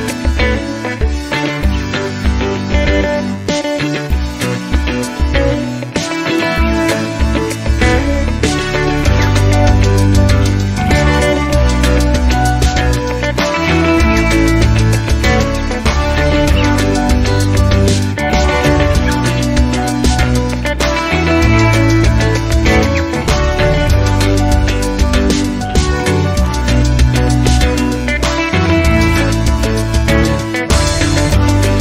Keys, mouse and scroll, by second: 2.0 click, 4.1 click, 6.7 ctrl+click, 7.6 ctrl+click, 8.6 ctrl+click, 9.5 ctrl+click, 12.1 ctrl+click, 13.2 ctrl+click, 14.0 ctrl+click, 14.9 ctrl+click, 16.0 click, 17.4 click, 18.3 ctrl+click, 19.3 ctrl+click, 23.1 click, 24.7 ctrl+click, 25.6 ctrl+click, 26.3 ctrl+click, 27.1 ctrl+click, 28.5 click, 29.3 ctrl+click, 30.0 ctrl+click, 31.0 ctrl+click, 31.7 ctrl+click.